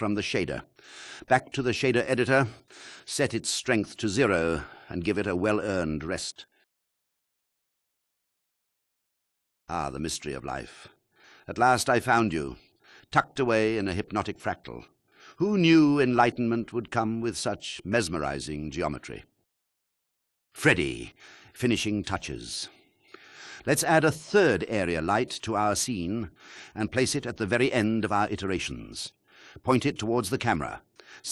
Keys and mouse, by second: 1.6-2.8 drag, 4.3 drag, 10.6 space, 20.1 KP_0, 23.0 shift+a, 25.9 ctrl+z, 26.6 KP_3, 27.9 click, 28.9 click, 29.2 g, 29.3 y, 30.6 r.